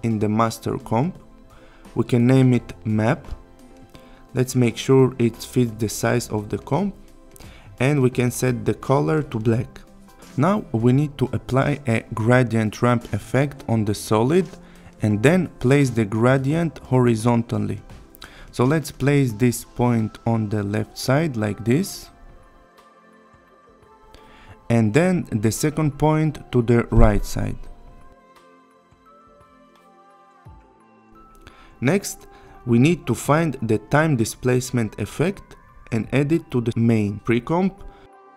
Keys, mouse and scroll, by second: 0.6 click, 2.5-3.4 typing, 4.4 click, 11.1 click, 13.1-14.6 typing, 15.8-16.8 click, 19.2-21.3 click, 25.8-27.2 click, 30.3 Return, 32.7 click, 35.0-35.4 click, 35.6-36.9 typing, 37.3-38.3 click.